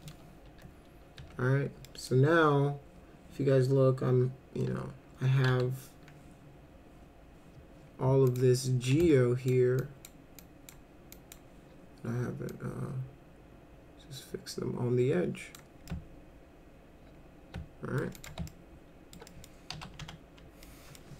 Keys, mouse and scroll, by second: 0.5 1, 1.2 1, 1.8 middle click, 4.7 2, 5.5 w, 8.3 ctrl+click, 9.0 alt+click, 9.8 alt+click, 10.4 alt+click, 11.2 alt+click, 12.5-15.6 drag, 15.9-18.0 alt+middle drag, 18.1 click, 18.5 alt+middle click, 19.3 middle click, 19.7 F4, 20.0 F3, 20.6 middle click.